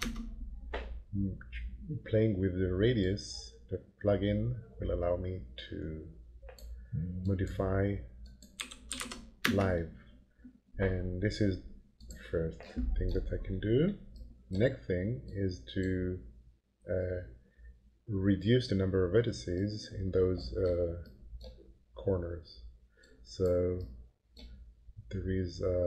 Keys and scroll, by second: 0.0 Return, 8.3-9.5 typing.